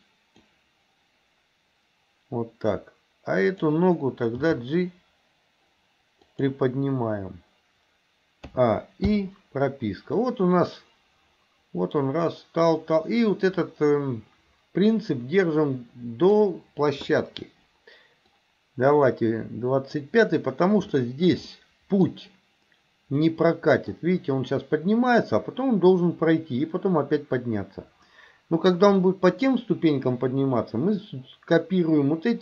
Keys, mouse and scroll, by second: 3.5 click, 4.3 g, 8.6 a, 9.1 i, 10.2-16.5 drag, 18.4-20.1 drag, 21.0-21.3 shift+middle drag, 21.6 middle click, 23.3 middle click, 29.1-29.5 middle drag.